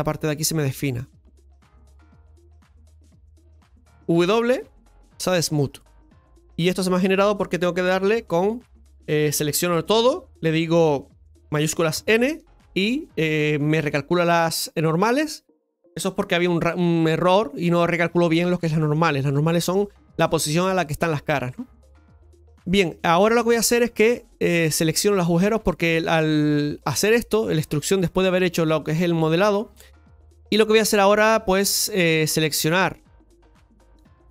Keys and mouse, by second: 1.8-4.5 middle drag, 2.5 Tab, 4.5 w, 6.1-8.1 middle drag, 8.1 Tab, 9.3 a, 12.0 shift+n, 19.5 middle click, 21.8 middle click, 22.8 Tab, 24.8 Tab, 24.8-26.4 drag, 29.2 middle click, 29.9 Tab, 30.4 shift+middle click, 30.8-32.4 middle drag, 32.4 Tab, 32.4-33.5 right drag, 33.5-34.3 drag.